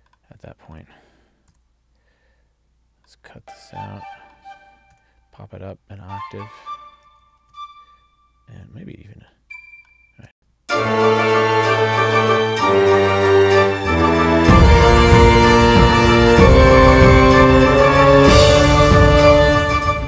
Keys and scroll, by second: 7.5 alt+shift+Up, 10.4 space.